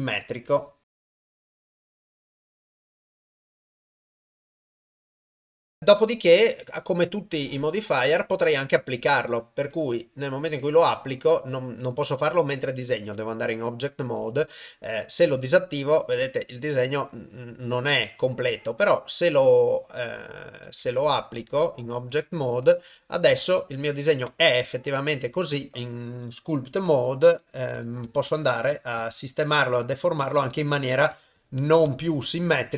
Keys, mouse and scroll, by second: 0.5 click, 0.8 click, 0.9 click, 1.0 click, 1.2 click, 1.5 click, 1.6 click, 1.8 click, 2.0 click, 2.4 ctrl+middle click, 2.5 click, 3.1 click, 3.3 click, 3.6 click, 4.1 click, 4.2 click, 4.3 click, 4.4 click, 4.6 click, 4.7 click, 4.8 click, 4.9 click, 5.1 click, 5.3 click, 5.4 click, 5.7 click, 9.8-12.8 drag, 13.1 Tab, 18.7-20.1 drag, 20.8 ctrl+Tab, 22.2 click, 23.3 Tab, 24.3 Tab, 25.1 Tab, 25.7 ctrl+Tab, 26.8 f, 27.8 click, 28.1 click, 28.3 click, 28.5 click, 28.7 click, 29.0 click, 29.2 click, 29.5 click, 29.8 click, 30.0 click, 30.2 click, 30.5 click, 30.8 click, 31.1 click, 31.6 click, 31.9 click, 32.1 click, 32.3 click, 32.5 click.